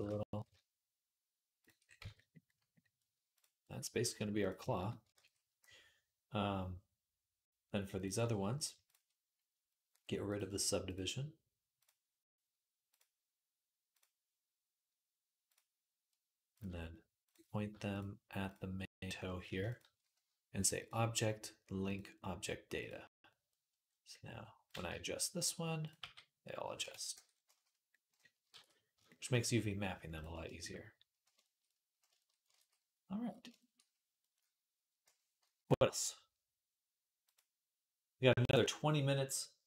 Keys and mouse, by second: 0.1 s, 1.8 Tab, 3.2-7.7 middle drag, 5.5 ctrl+s, 7.7 click, 7.8 middle click, 8.6 shift+click, 8.7-10.2 shift+middle drag, 10.2 click, 10.7 middle click, 11.6-13.8 drag, 13.8-15.3 middle drag, 15.3-16.4 drag, 16.4 middle click, 17.1 click, 17.2-19.5 middle drag, 19.5 shift+click, 19.6-20.7 shift+middle drag, 20.7-24.5 drag, 24.5-37.1 middle drag, 24.7 Tab, 25.8 g, 26.9 Tab, 28.9 ctrl+s, 32.8 ctrl+s, 35.2 /, 37.1 click, 37.2-38.5 middle drag, 38.5 click, 38.7-39.6 middle drag.